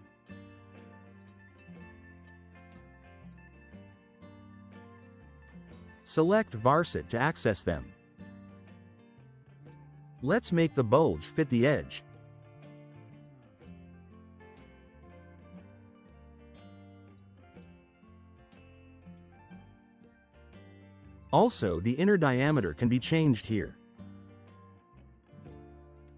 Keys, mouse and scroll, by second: 1.0 space, 1.3 click, 1.5 space, 1.7 click, 1.9 space, 2.1 click, 2.3 space, 3.6 click, 6.4 click, 9.1 click, 10.0 5, 10.4 Return, 13.3 click, 13.9 1, 14.1 3, 14.5 Return, 16.7-17.7 typing, 16.8 click, 22.4 click, 22.6-23.5 typing, 26.0-26.1 drag.